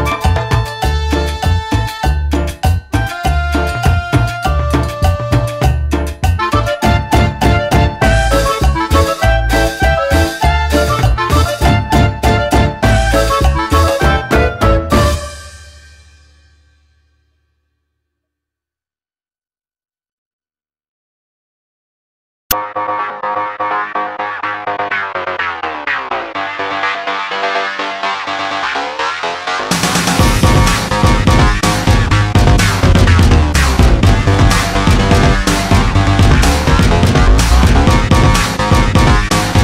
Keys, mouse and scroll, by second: 0.5 middle click, 0.9 middle click, 1.4 middle click, 3.1 click, 3.9 click, 4.5 click, 6.3 click, 8.7 click, 10.6 click, 10.9 middle click, 11.5 middle click, 11.5 scroll up 1, 12.4 click, 12.6 click, 13.2 click, 15.0 click, 16.2 click, 17.5 click, 17.8 middle click, 18.2 middle click, 19.0 click, 21.0 click, 21.0 middle click, 21.3 middle click, 22.7 click, 23.1 click, 23.9 scroll down 1, 26.3 click, 27.3 click, 28.3 click, 29.4 click, 30.8 click, 31.1 click, 31.3 middle click, 31.7 scroll up 1, 33.4 click, 34.9 click, 35.6 click, 36.9 click, 38.3 click, 38.8 click.